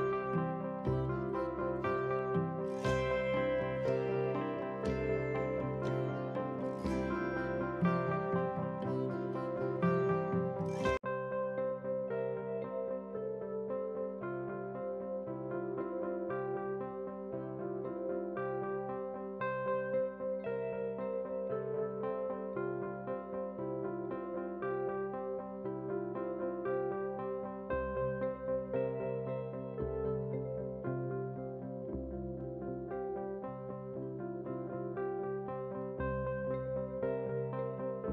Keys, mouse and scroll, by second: 0.0-0.7 typing, 2.3 r, 3.6 g, 4.8 click, 5.2 g, 6.7-7.0 drag, 7.6 KP_1, 8.0 scroll up 3, 8.3 shift+middle click, 8.7 shift+d, 9.4 g, 12.6 click, 12.8 shift+click, 13.0 shift+click, 13.4 shift+d, 14.1 g, 15.5 click, 15.7 shift+click, 16.1 shift+d, 16.7 g, 17.9-18.6 scroll down 2, 18.1 middle drag, 18.6 middle drag, 19.0 click, 19.4 s, 20.3 KP_3, 20.5-21.2 scroll up 2, 21.2 scroll down 1, 21.4-21.9 middle drag, 22.2-22.7 drag, 22.9-23.5 scroll down 3, 23.0 middle drag, 23.5 shift+drag, 23.9 KP_3, 24.2 scroll up 3, 24.4 shift+middle click, 24.7 g, 25.5 shift+click, 25.9 shift+click, 26.1 scroll down 2, 26.2 shift+middle click, 26.4 middle drag, 27.4 ctrl+l, 28.8 click, 29.1 click, 29.6 ctrl+z, 30.2 ctrl+z, 30.8 click, 31.0 middle drag, 31.4 click, 32.9 click, 33.6 click, 33.8 middle drag, 34.3-34.7 drag, 34.9 click, 35.1 click, 35.3 shift+click, 35.5 shift+drag, 35.6 shift+click, 35.7 shift+click, 35.8 shift+click, 36.0 shift+click, 36.1 shift+click, 36.2 shift+click, 36.4 shift+click, 36.5 shift+click, 36.6 shift+click, 36.8 shift+click, 37.0 shift+click, 37.2-37.7 middle drag.